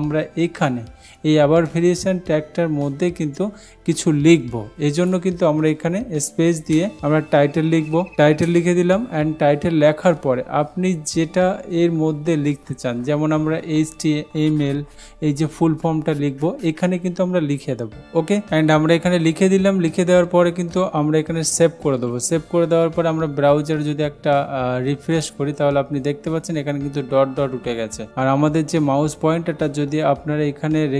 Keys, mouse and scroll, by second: 5.1 click, 6.7 space, 7.9-8.6 typing, 21.9 ctrl+s, 25.3 click.